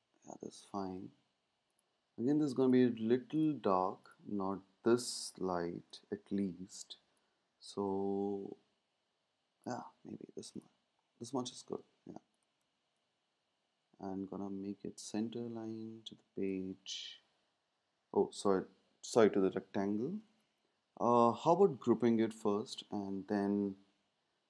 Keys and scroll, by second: 20.2 super+z, 22.2 super+g.